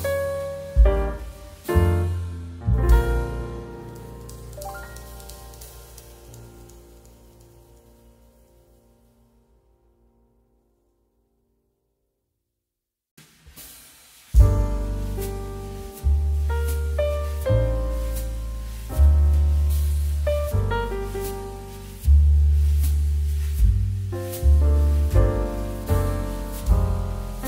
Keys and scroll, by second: 3.2 space, 7.0 space, 14.4 space.